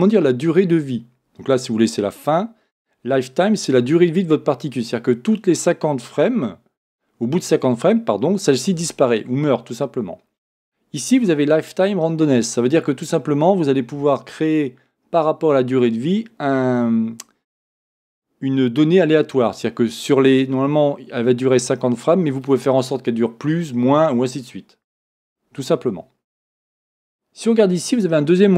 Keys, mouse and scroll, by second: 27.8 click.